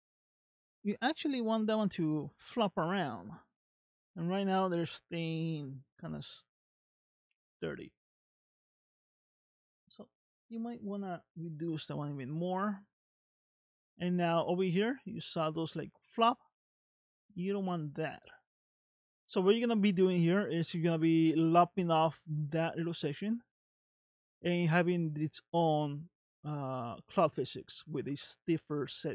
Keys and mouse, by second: 0.4 space, 0.6 shift+middle click, 1.4 space, 3.8 space, 6.7-7.8 middle drag, 8.2 middle click, 9.9-11.6 drag, 12.2 space, 13.8 space, 17.2 middle click.